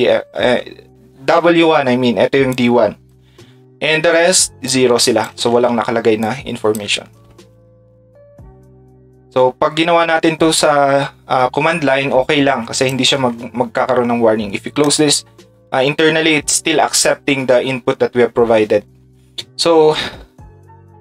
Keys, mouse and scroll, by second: 2.5 ctrl+shift+click, 2.6 ctrl+shift+middle click, 2.6 ctrl+shift+right click, 4.7 ctrl+shift+click, 4.7 ctrl+shift+middle click, 4.7 ctrl+shift+right click, 6.2 ctrl+click, 12.8 click, 13.1 ctrl+s, 14.8 click.